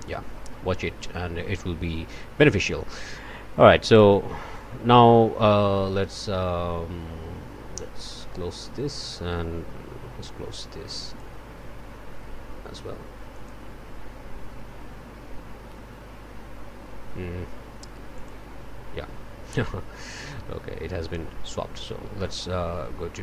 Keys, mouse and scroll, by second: 0.1 click, 3.9 click, 4.5 click, 11.0 click, 13.3 click, 18.1 click, 22.2 click.